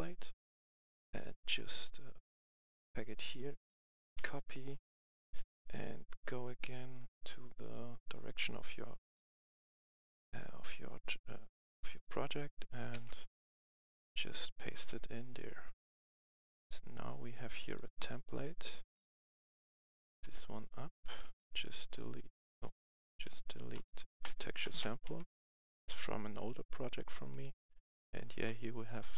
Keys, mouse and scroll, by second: 1.5 click, 4.1 ctrl+c, 5.3 click, 6.7 right click, 7.6 click, 12.8 ctrl+v, 14.1 click, 19.8 click, 19.9 right click, 20.3-20.8 scroll down 1, 20.8 click, 22.0 Delete, 23.0 ctrl+z, 23.6-24.9 drag, 24.0 Delete.